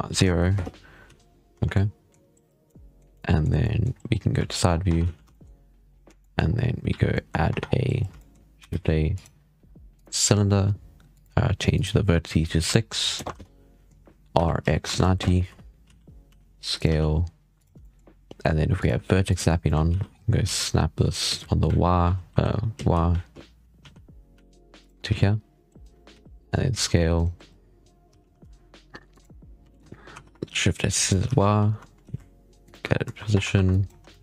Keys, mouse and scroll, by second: 0.9 z, 1.2 scroll down 1, 1.4 Tab, 1.6-2.2 middle drag, 2.5-2.9 middle drag, 2.9 scroll down 1, 3.0 middle click, 4.5 scroll up 6, 4.8 Tab, 4.9 z, 5.2 shift+middle click, 5.7 scroll down 5, 6.1 shift+middle drag, 6.3 scroll up 4, 6.8 z, 7.0-7.4 middle drag, 7.4 Tab, 7.5 scroll down 5, 8.0-8.6 shift+middle drag, 8.6 shift+a, 11.0-14.2 drag, 14.2 r, 15.8 z, 16.2 s, 16.8 g, 17.7 shift+middle drag, 17.9-18.6 scroll up 6, 18.6-19.5 drag, 19.5 shift+middle click, 19.8 z, 20.0 scroll up 3, 20.3 g, 24.9 z, 26.0 z, 26.3-26.6 scroll down 1, 26.6 s, 27.7 scroll up 3, 28.0 g, 29.5 s, 31.1 g, 32.7-33.0 scroll down 5, 33.2 Tab, 33.4 1, 33.6 click, 34.1 shift+middle click.